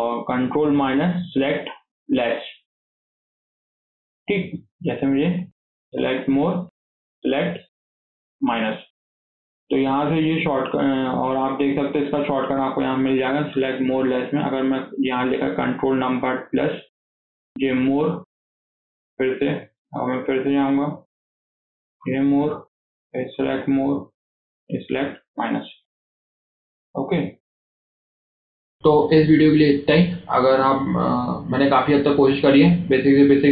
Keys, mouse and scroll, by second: 0.5 ctrl+KP_Subtract, 0.7 ctrl+KP_Subtract, 0.9 ctrl+KP_Subtract, 1.2 ctrl+KP_Subtract, 2.1 ctrl+KP_Subtract, 2.4 ctrl+KP_Subtract, 2.7 ctrl+KP_Subtract, 3.2 ctrl+KP_Subtract, 4.1 middle click, 4.7 click, 5.6 ctrl+KP_Add, 5.8 ctrl+KP_Add, 6.0 ctrl+KP_Add, 6.7 ctrl+KP_Subtract, 7.0 ctrl+KP_Subtract, 7.2 ctrl+KP_Subtract, 7.7 ctrl+KP_Subtract, 8.4-9.8 middle drag, 9.8 click, 10.1 scroll up 1, 10.4 middle click, 10.7 scroll down 2, 10.9-12.3 shift+middle drag, 12.3-15.4 drag, 19.3-22.4 drag, 22.7-25.7 drag, 25.7 middle click, 26.1 click, 26.4 middle click, 26.7-27.3 scroll up 4, 27.3 KP_1, 28.4 click, 28.4-30.1 scroll down 3.